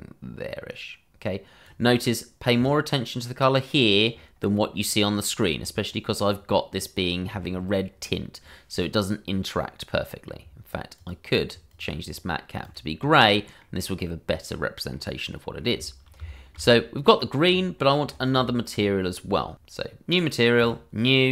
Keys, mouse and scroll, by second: 1.4 click, 9.0-9.5 scroll down 1, 9.5 middle click, 10.9 click, 13.3 middle click, 16.3 shift+middle click, 16.4 middle click, 17.3 shift+middle click, 17.4-17.8 scroll, 19.5 click.